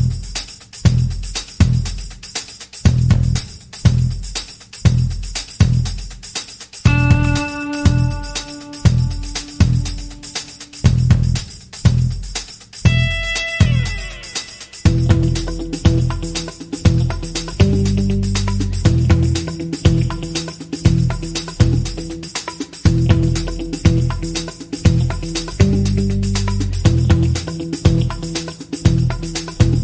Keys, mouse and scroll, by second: 2.7-10.2 drag, 4.4-7.2 scroll down 2, 15.3-21.1 middle drag, 21.1-24.4 drag, 22.4 scroll down 1, 23.4 scroll up 1, 24.4-29.7 middle drag.